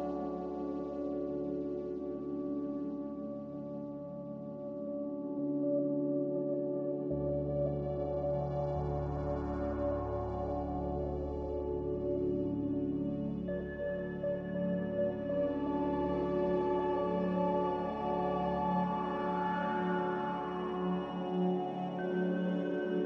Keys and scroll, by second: 18.9 z, 20.8 Escape.